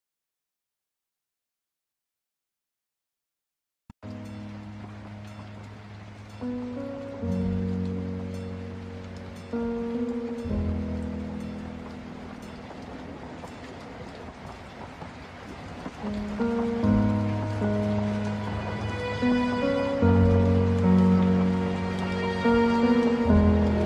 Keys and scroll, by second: 1.1 ctrl+z, 3.8 ctrl+alt+space, 5.0 ctrl+z, 7.9 ctrl+z, 8.3 ctrl+space, 11.1 ctrl+alt+space, 13.2 ctrl+0, 22.3 ctrl+t.